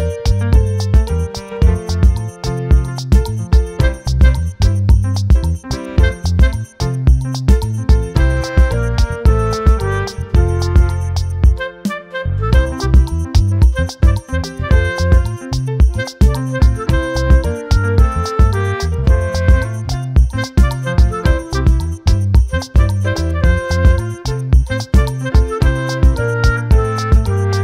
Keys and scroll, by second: 27.5 ctrl+t.